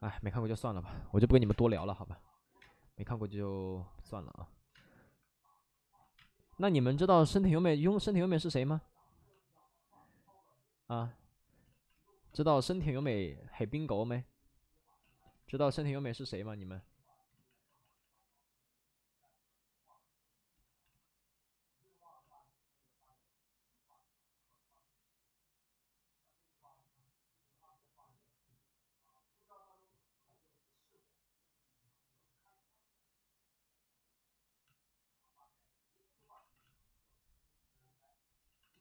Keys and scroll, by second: 0.0 alt+s, 0.0 3, 1.1 ctrl+z, 1.3 3, 1.7 3, 1.7 space, 2.5 space, 4.6 space, 5.0 1, 5.9 ctrl+z, 6.1 space, 7.4 ctrl+z, 7.5 ctrl+z, 7.7 ctrl+z, 12.8 x, 17.2 ctrl+z, 17.4 ctrl+z, 17.5 ctrl+z, 17.7 ctrl+z, 17.9 ctrl+z, 36.1 ctrl+z, 36.4 x, 38.4 x.